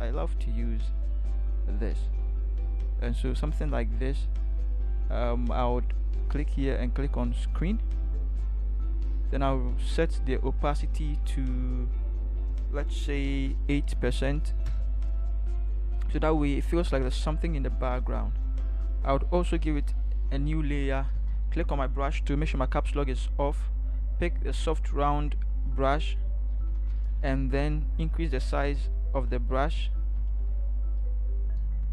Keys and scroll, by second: 14.0 8, 14.7 Return, 21.1 b, 27.8 ], 28.0 ], 28.1 ], 29.5 ], 29.7 ], 29.9 ], 30.2 ].